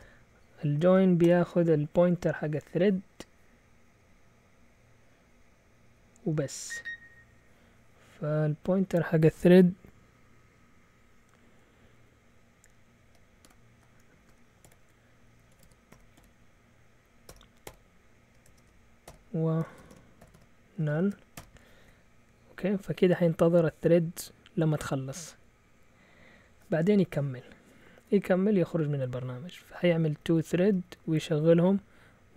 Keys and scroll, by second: 0.0-2.3 typing, 13.4-21.3 typing, 28.5 typing, 29.7 Up, 29.9 Up, 30.0 Up, 30.2 Up, 30.3 Up, 30.5 Up, 30.6 Up, 30.8 Down, 31.0 Down, 31.1 Down, 31.3 Down, 31.4 Down, 31.5 Down.